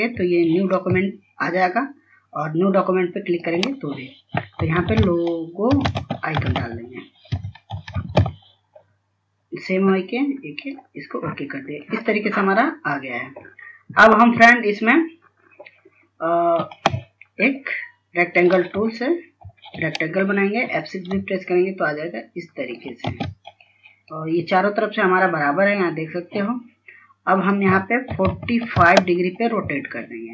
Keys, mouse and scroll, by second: 0.2 typing, 3.5 click, 5.0-8.4 typing, 10.9 click, 19.1-20.7 typing, 21.2 shift+click, 23.4 space, 24.0 click, 28.5 KP_4, 28.7 KP_5, 30.0-30.3 scroll up 1.